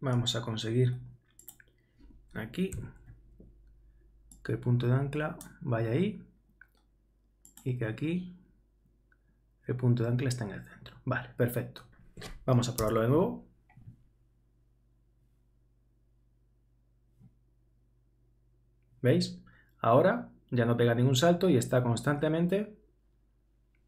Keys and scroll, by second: 12.8 super+Return.